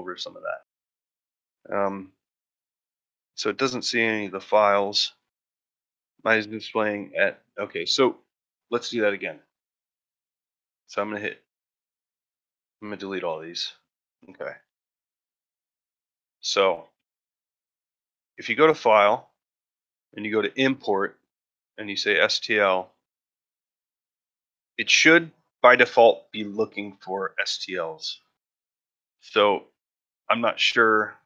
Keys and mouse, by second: 9.9 middle drag, 10.3 ctrl+middle drag, 11.0 a, 12.1 shift+middle click, 12.5 x, 13.3 shift+middle click, 13.7 middle drag, 14.0 shift+middle click, 14.4 ctrl+middle drag, 14.7-15.4 shift+middle drag, 15.7 middle drag, 16.0 shift+middle drag, 16.5 ctrl+middle drag, 16.9 shift+middle drag, 17.2 shift+middle drag, 17.5 middle drag, 17.9 shift+middle drag.